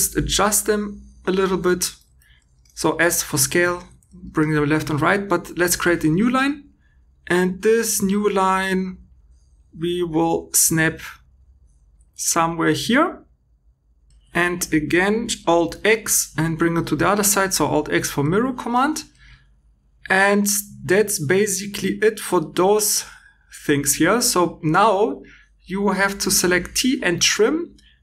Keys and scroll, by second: 15.7 alt+x.